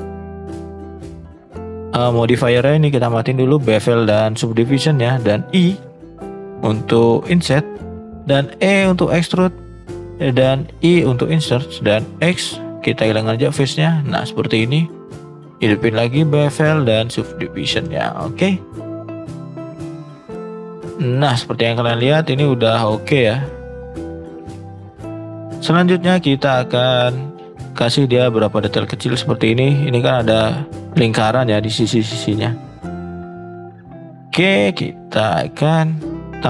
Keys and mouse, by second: 0.1 click, 1.0 shift+middle click, 3.4 shift+middle click, 4.5 shift+middle click, 7.2 shift+middle click, 7.5 middle click, 8.0 e, 9.3 middle click, 10.6 i, 12.3 x, 13.6 middle click, 14.2 middle click, 15.5 click, 16.4 click, 17.1 middle click, 17.9 shift+middle click, 19.3-19.8 drag, 20.4-20.8 middle drag, 21.1 middle drag, 21.8-22.8 middle drag, 23.3 middle drag, 24.1 shift+middle drag, 24.6 middle drag, 25.3 shift+middle drag, 27.1 shift+middle drag, 27.8 middle drag, 28.7 shift+middle drag, 31.8 shift+middle click, 32.6 shift+middle click, 32.9 middle drag, 33.5 shift+middle drag, 33.8 middle drag, 34.7 middle click, 35.0 shift+middle drag, 35.3 shift+middle drag.